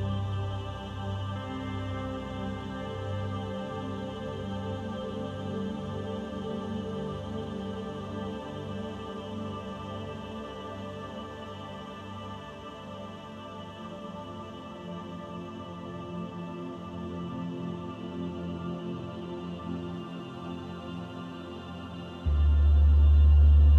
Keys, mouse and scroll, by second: 0.7 click, 4.4 click, 6.5 Tab, 7.3 middle click, 8.6 shift+middle click, 9.1 middle click, 13.5 click, 18.4 click.